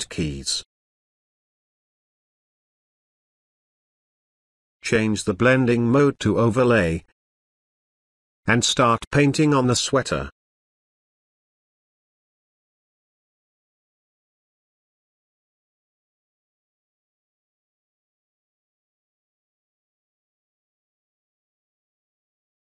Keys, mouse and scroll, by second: 5.0 click, 8.3 click, 8.3 click, 11.1-12.4 drag, 22.2 ctrl+space, 22.3 ctrl+click, 22.4-22.7 ctrl+space.